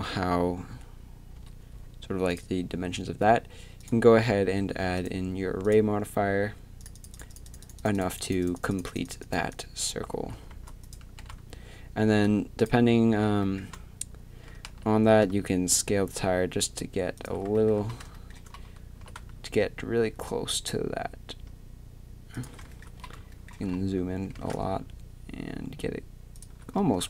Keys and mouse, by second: 1.4 KP_3, 10.1 z, 11.2 s, 14.7 s, 19.0 s.